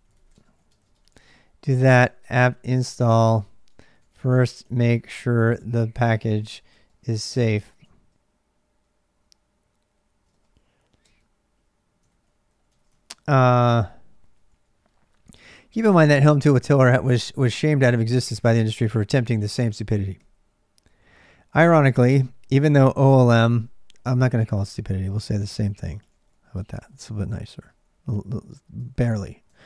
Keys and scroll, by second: 0.0-29.6 typing, 27.3 ctrl+[, 28.6 ctrl+[.